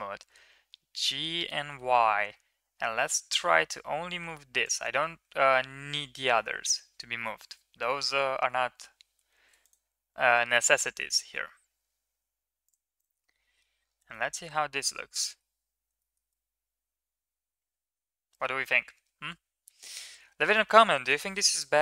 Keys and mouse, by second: 0.0 g, 9.0 alt+h, 9.4 click, 10.3 shift+middle click, 11.3 Tab, 13.0-13.4 middle drag, 14.0-14.4 shift+middle drag, 14.6-15.2 middle drag, 15.8 shift+middle drag, 16.2-18.2 middle drag, 19.5 ctrl+KP_3.